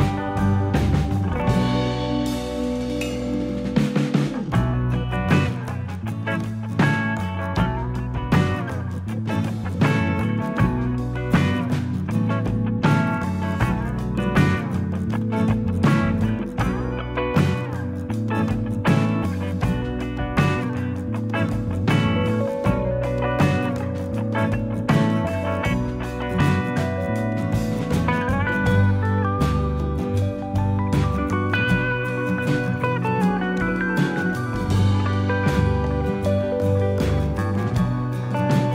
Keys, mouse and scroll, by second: 2.8 shift+middle click, 3.1-3.5 scroll up 4, 3.9 shift+middle click, 4.5 shift+click, 5.4 click, 6.8 click, 9.1 click, 9.8 click, 11.7 shift+click, 12.5 e, 13.6 click, 18.0 e, 18.8 click, 20.9 click, 23.8 shift+middle click, 26.4 shift+click, 27.2 click, 32.6 click, 33.5 click, 34.2 e, 35.2 click, 38.1 click.